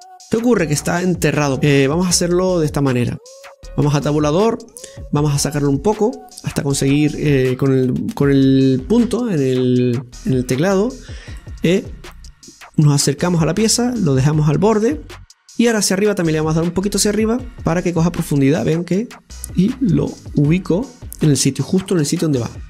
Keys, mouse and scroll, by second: 0.4-1.1 scroll up 1, 1.1 scroll up 2, 1.1-3.0 middle drag, 3.0-4.5 right drag, 4.5 Tab, 5.1-6.4 middle drag, 6.4-7.5 drag, 7.5-9.9 middle drag, 10.1 KP_Decimal, 11.2-13.7 middle drag, 13.7-16.7 drag, 20.1 click, 22.4 scroll down 1.